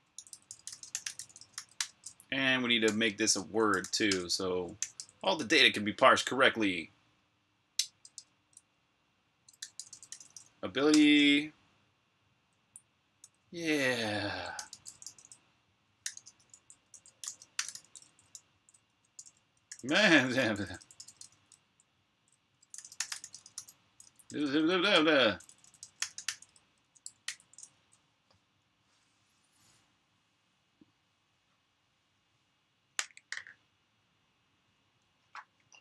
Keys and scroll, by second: 0.0-0.9 typing, 2.4-5.2 typing, 8.0 Escape, 9.1-10.6 typing, 10.7 Return, 13.1-20.2 typing, 27.1 super+b, 27.1-28.3 typing, 27.3 Escape, 28.4 super+h.